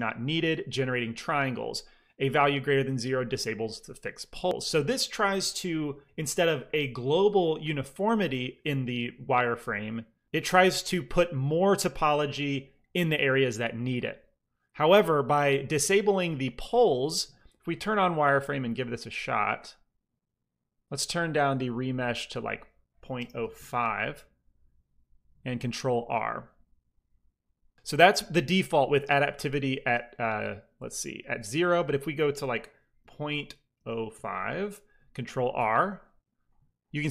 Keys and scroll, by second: 22.9 ., 23.0 0, 23.3 5, 23.4 Return, 25.6 ctrl+r, 32.9 ., 33.6 0, 33.8 KP_5, 34.0 Return, 35.4 ctrl+r.